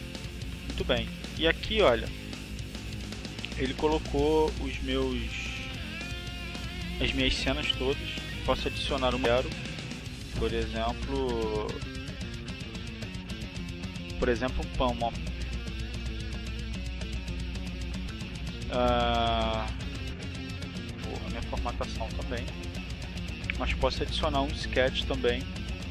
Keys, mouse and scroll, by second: 0.9-3.1 middle drag, 5.5 middle click, 7.2 click, 11.7 click, 13.0 click, 14.9-17.5 typing, 17.7 click, 18.1 click, 20.1 click, 20.4 middle click, 20.7 click, 21.4 click, 22.2 click, 23.9 click, 24.4 click, 25.6 click.